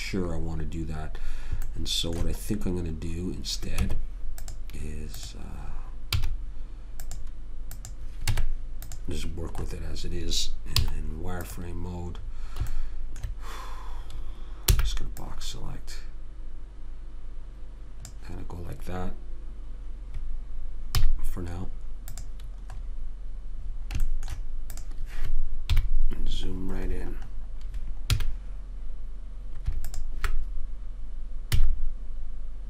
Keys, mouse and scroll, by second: 4.2 Tab, 6.4 z, 8.6 Tab, 9.9-11.8 drag, 11.1 z, 15.1 b, 21.3 x, 24.4 middle click, 24.8-26.0 middle drag, 25.1 click, 26.0 KP_Decimal, 28.4 a, 31.9 x.